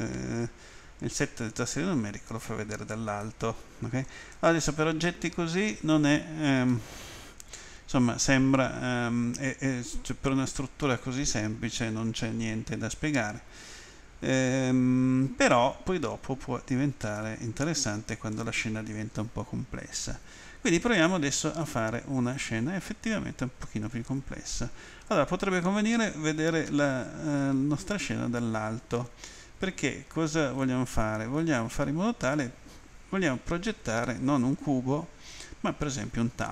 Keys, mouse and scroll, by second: 3.2 middle click, 6.7 middle click, 17.1 middle click, 26.7 Home.